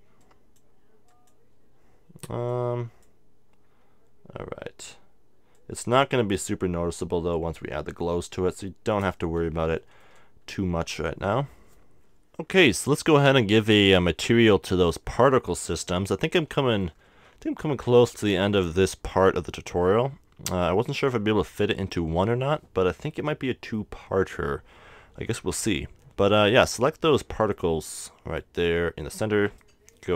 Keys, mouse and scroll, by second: 2.4-4.3 middle drag, 5.6-7.4 drag, 8.5-11.7 middle drag, 12.1-14.1 middle drag, 14.8-16.2 right drag, 16.6-18.3 middle drag, 18.8 click, 19.0 right click, 19.3 KP_1, 20.6 KP_0, 21.6-23.7 middle drag, 27.5-29.3 drag, 29.0-30.1 middle drag, 29.7-30.1 right drag.